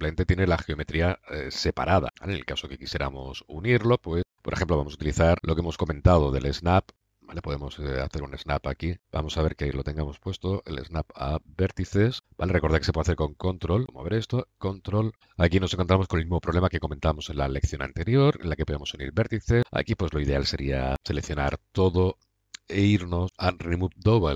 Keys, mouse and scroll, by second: 3.1-4.1 middle drag, 4.1 click, 4.2 middle click, 6.1-7.9 drag, 7.9-8.9 middle drag, 10.0 middle click, 10.3-11.9 drag, 12.1-14.4 drag, 15.2 middle click, 15.6 click, 15.7 middle click, 15.9-19.6 middle drag, 20.9 a, 21.3 a, 23.2-24.3 middle drag.